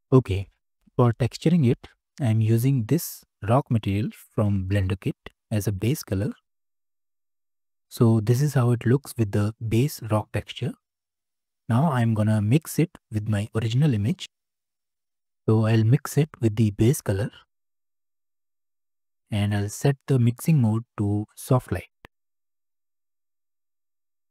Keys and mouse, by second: 8.3-10.9 middle drag, 11.4-13.6 middle drag, 17.6-18.4 ctrl+shift+drag, 19.2 click, 20.4-22.6 drag, 23.7-24.3 drag.